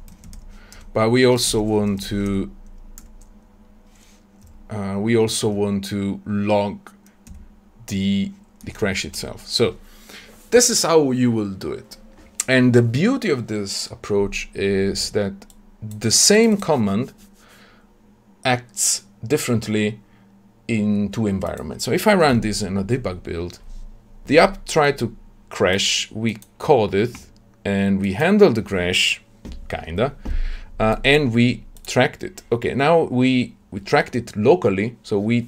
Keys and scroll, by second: 5.3 Tab, 22.2 shift+F10.